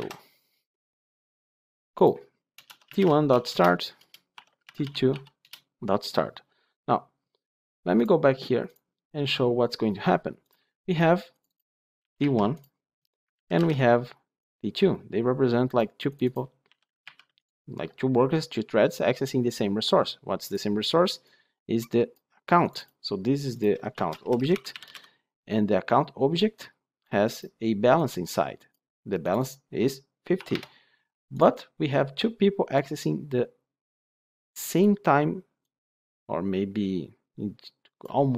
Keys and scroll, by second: 3.4 Return, 4.6 Return.